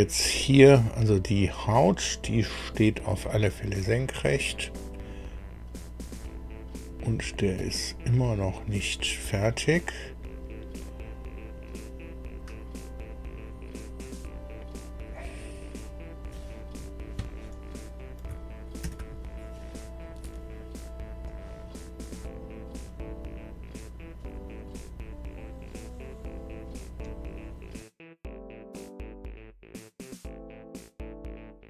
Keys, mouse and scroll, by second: 0.3-0.8 scroll up 1, 1.8 click, 3.4 click, 5.0-5.3 scroll down 1, 7.6 click, 8.1-8.4 scroll down 1, 8.4-8.8 scroll up 1, 18.8 ctrl+alt+Delete, 21.2-24.4 drag.